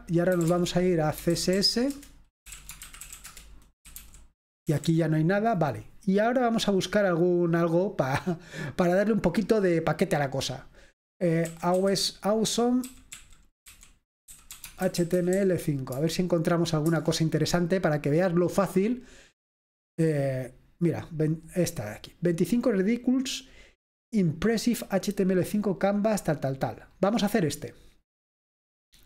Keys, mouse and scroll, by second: 0.0-4.8 typing, 11.6-16.0 typing, 17.0 Return, 21.6 click, 27.4-28.8 scroll up 1.